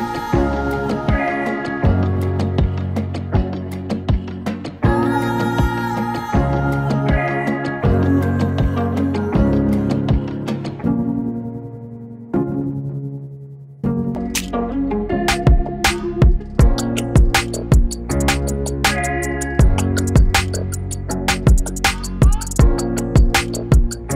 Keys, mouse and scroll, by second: 0.4 click, 4.1 click, 6.1 shift+Num_Lock, 6.1 click, 10.9-20.2 drag, 20.4-23.2 drag.